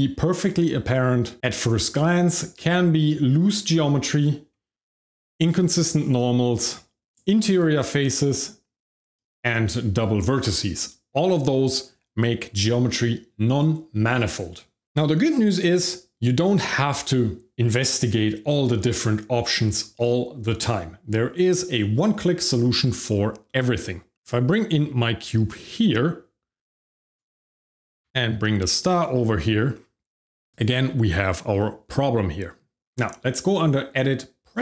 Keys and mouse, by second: 2.6 shift+middle click, 24.3 middle click, 25.6 click, 27.0 click, 27.7 g, 27.8 x, 28.9 click, 29.4 drag, 30.2 shift+click, 30.5 click, 31.6 shift+drag, 33.4-34.6 drag.